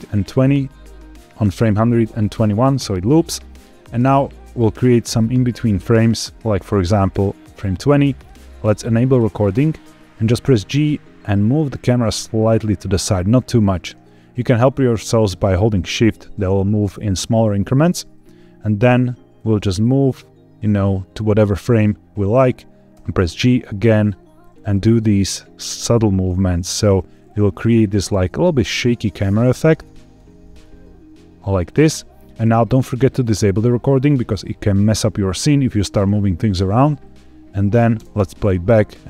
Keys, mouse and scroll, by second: 2.4 click, 3.9-7.5 drag, 9.1 click, 10.3 g, 13.8 shift+click, 19.3-21.8 drag, 22.8 g, 23.9 shift+click, 24.6 click, 25.7 g, 26.6 shift+click, 27.2 click, 28.0 g, 28.9 shift+click, 29.6 click, 30.3 g, 31.3 shift+click, 36.3 click, 37.9 space.